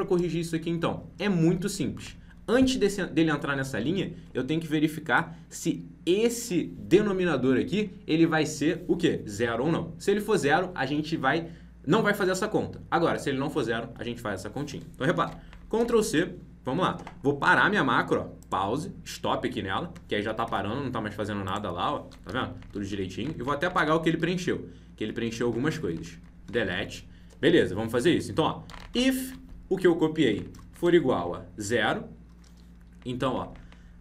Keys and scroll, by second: 15.2 ctrl+c, 20.4 alt+Tab, 22.2 ctrl+Right, 23.4 ctrl+Left, 25.9 ctrl+shift+Right, 26.7 alt+Tab, 29.2 ctrl+v.